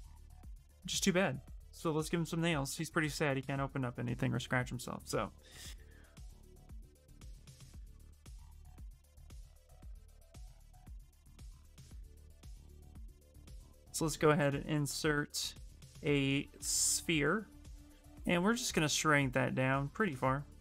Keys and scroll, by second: 1.7 s, 3.1 Return, 17.6 w.